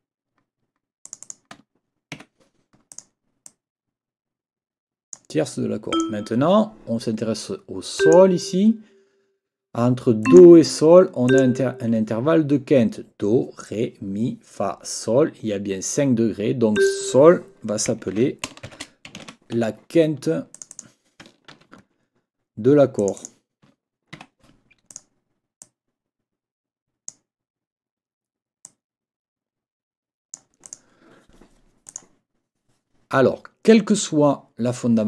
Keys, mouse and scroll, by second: 1.0 click, 2.1 Escape, 2.9 click, 3.4-5.3 drag, 5.9 click, 8.0 click, 10.2 click, 11.3 click, 16.8 click, 18.1 ctrl+t, 18.7 ctrl+shift+(, 18.8-19.7 typing, 20.5 click, 21.5 ctrl+a, 23.0 click, 24.2 Escape, 24.9 click, 25.6-27.3 drag, 28.6-30.5 drag, 30.6 click, 31.9 click.